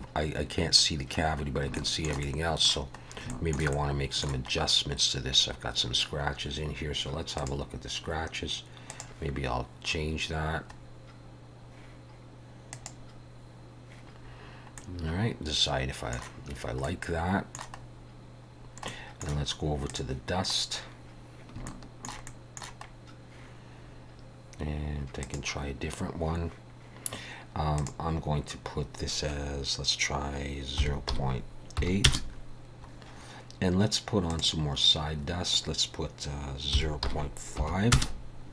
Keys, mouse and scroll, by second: 1.4 scroll down 1, 1.8 shift+middle click, 2.3 middle click, 3.1 scroll up 2, 3.4 shift+middle click, 3.8 middle click, 4.7 scroll up 1, 5.6 scroll down 2, 7.4 click, 9.0 click, 10.9 scroll up 2, 12.8 click, 14.4 scroll down 3, 14.8 middle click, 16.9 middle click, 17.9 scroll up 2, 18.7 scroll down 1, 19.0 middle click, 20.0 click, 20.7 scroll down 1, 21.7 shift+middle click, 22.3 middle click, 23.1-23.4 scroll up 1, 24.2-24.7 scroll down 2, 25.3 click, 27.8 click, 34.3 click.